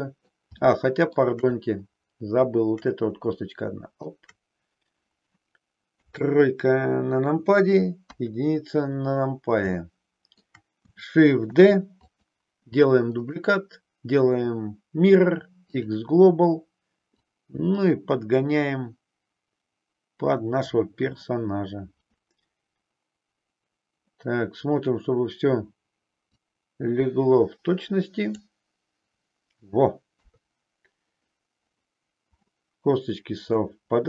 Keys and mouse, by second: 0.6 shift+middle click, 3.4 shift+click, 5.9 KP_3, 9.8 shift+middle click, 11.4 shift+d, 12.2 click, 14.4-17.0 right drag, 17.0-20.7 drag, 26.4-28.3 drag, 30.2 KP_3, 33.6-34.0 middle drag.